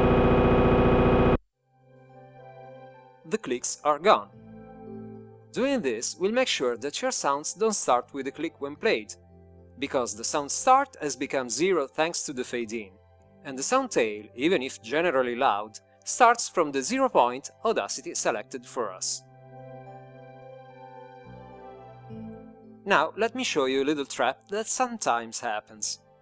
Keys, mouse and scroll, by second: 1.4 click.